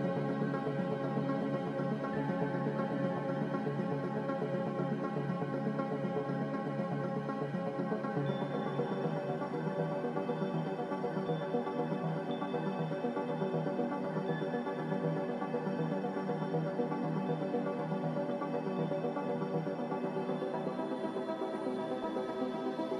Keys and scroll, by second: 1.8 Tab, 1.8 Return, 1.8 typing, 4.6-5.3 typing, 8.2 typing, 15.7 m.